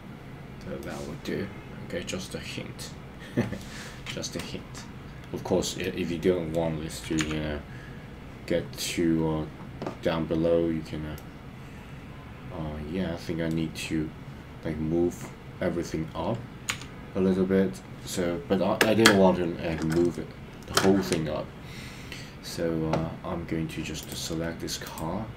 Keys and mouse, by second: 0.7-3.7 middle drag, 5.8 middle click, 7.2 KP_1, 11.1-13.5 middle drag, 16.7 KP_3, 24.9-25.3 drag.